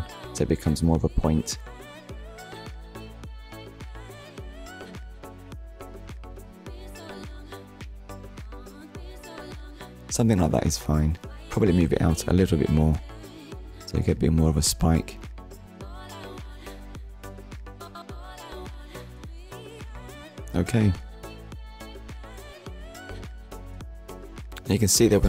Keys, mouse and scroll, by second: 5.5 click, 5.8 middle click, 7.6 KP_1, 11.3 click, 12.7 click, 19.0 Tab, 21.1 click, 21.8 scroll up 1.